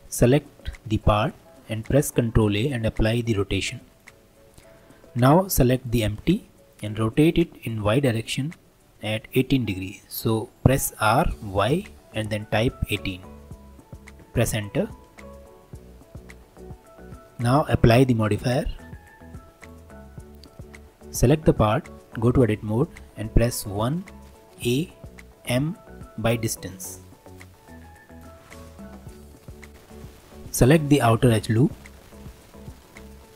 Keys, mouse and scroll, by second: 1.8 ctrl+a, 3.9 click, 5.6 drag, 7.0 r, 17.9-19.7 drag, 20.3 click, 21.2 click, 22.0 Tab, 23.8 1, 24.6 a, 25.5 m, 27.7 Tab, 28.1 click, 28.5-29.7 middle drag, 30.9 alt+click, 32.5 2.